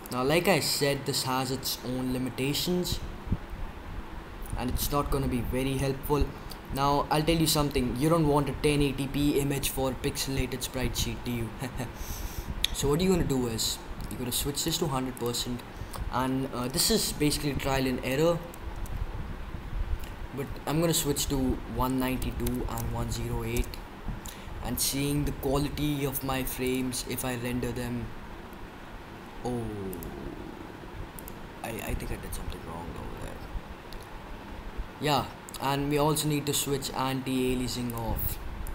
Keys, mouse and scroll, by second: 0.0-1.3 drag, 14.0-17.0 drag, 20.0-21.8 drag, 26.6 click, 29.0 Escape, 29.8-31.4 drag, 31.7 click, 33.7 Escape, 37.8-38.7 drag.